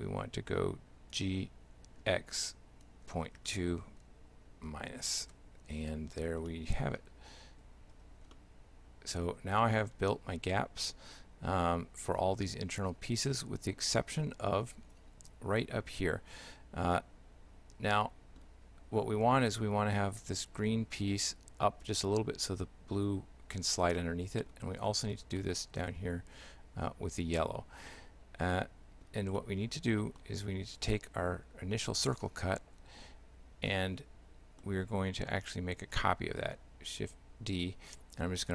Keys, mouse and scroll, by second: 1.2 g, 6.5 shift+middle click, 8.0 Tab, 8.4 shift+middle click, 14.2 middle click, 17.0 shift+middle click, 24.0 shift+middle click, 24.8 scroll down 1, 24.9 middle click, 25.4 shift+middle click, 27.9 middle click, 29.4 middle click, 30.0-30.8 scroll down 1, 30.8 middle click, 30.8 right click, 33.7 shift+middle click, 35.9 shift+d.